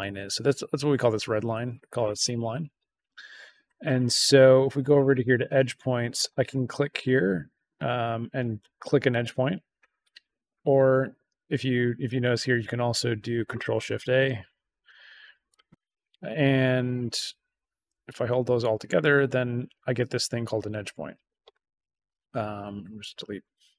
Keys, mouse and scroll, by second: 5.0 click, 8.7 click, 10.6 click, 11.9 click, 15.4 click, 16.2 click, 16.9 ctrl+a, 17.9 ctrl+shift+a, 18.9 click, 20.5 click, 22.9 BackSpace.